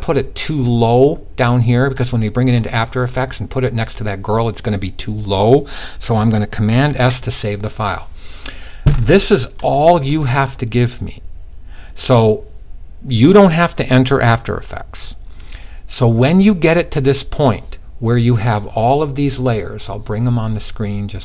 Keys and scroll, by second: 6.3 super+s.